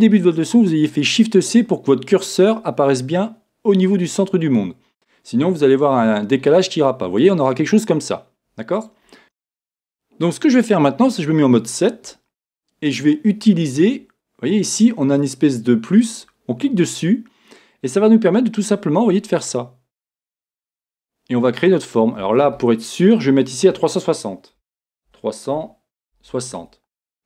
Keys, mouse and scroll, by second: 2.1-4.6 scroll down 2, 5.2-16.3 middle drag, 11.3 KP_7, 16.3-21.9 drag, 21.9-26.6 middle drag, 26.6-27.2 drag.